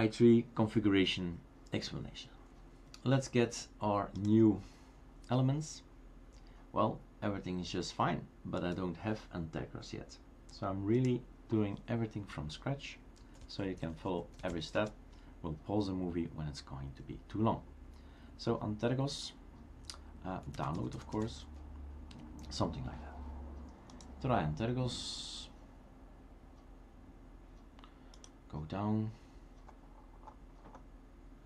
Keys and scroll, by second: 13.0-15.0 typing, 20.3-21.0 typing, 22.1 Return, 22.1 typing.